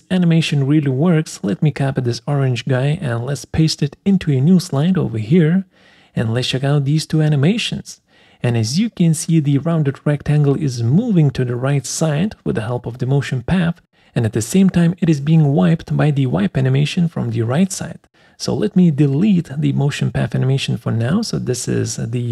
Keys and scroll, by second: 0.5 ctrl+c, 4.9 ctrl+v, 19.0 Delete.